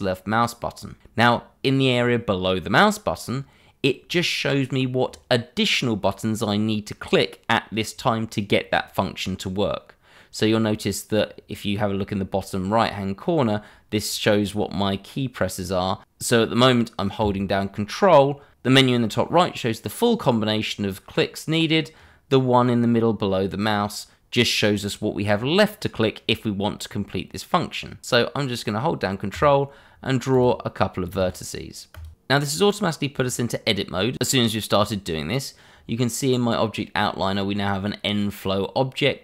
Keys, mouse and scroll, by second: 29.3 click, 30.3 click.